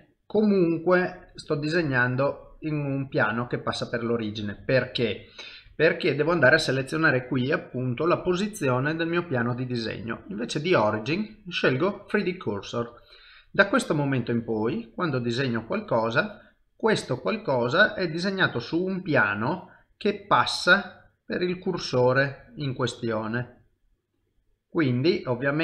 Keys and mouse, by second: 0.4 middle click, 3.1 middle click, 4.6 ctrl+z, 5.1 middle click, 14.2 click, 15.1 middle click, 16.2 click, 17.6 middle click, 19.1 click, 19.9 middle click, 22.4 click, 23.1 middle click.